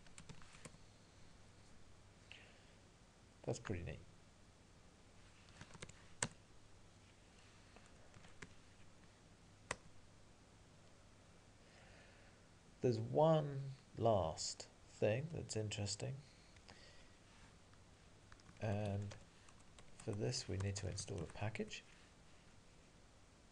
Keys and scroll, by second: 0.7 Return, 9.8 Return, 18.5 alt+x, 20.0 Tab.